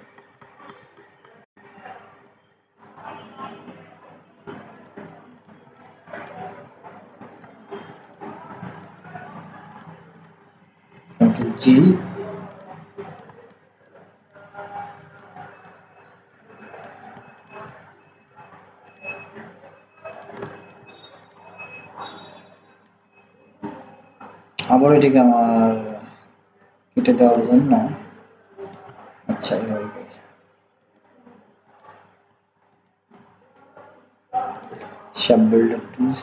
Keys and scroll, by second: 11.5 ctrl+g.